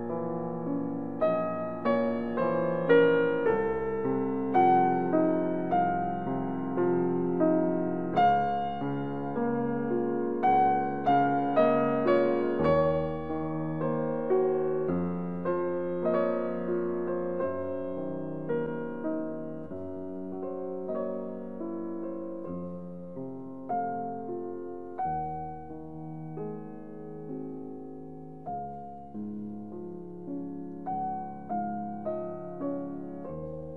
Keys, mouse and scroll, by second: 12.6-18.4 middle drag, 18.4 scroll up 1, 19.5-23.9 middle drag, 23.9 ctrl+r, 26.5 2, 30.3 click.